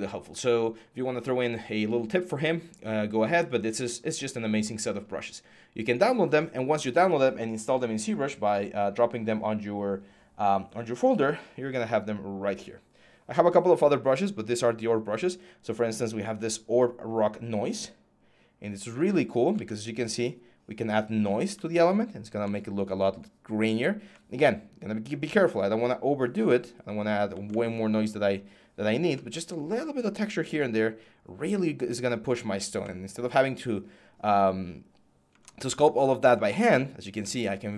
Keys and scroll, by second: 19.4 ctrl+z.